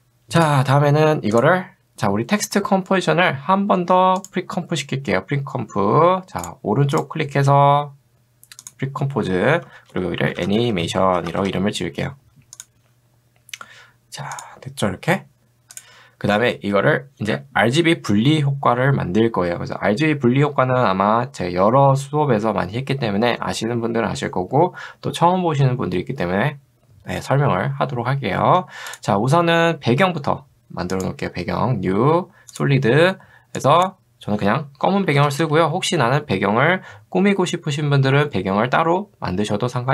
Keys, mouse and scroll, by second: 4.2 right click, 6.4 click, 9.7-12.1 typing, 12.6 click, 14.4 click, 17.0 middle click, 28.9 click, 31.0 right click, 33.6 click, 34.7-35.9 typing.